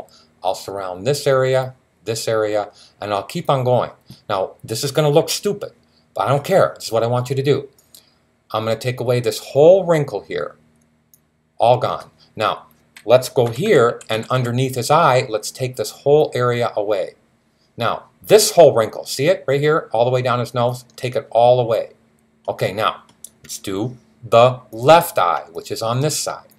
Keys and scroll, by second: 13.3-14.2 typing.